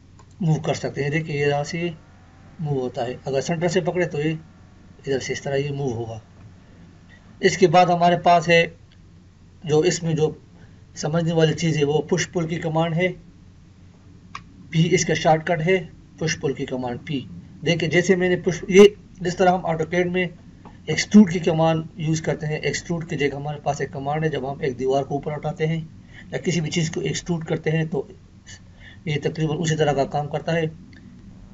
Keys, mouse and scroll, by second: 3.1 Escape, 3.7 click, 6.1 Escape, 14.3 p, 18.3 Escape, 31.1 Escape.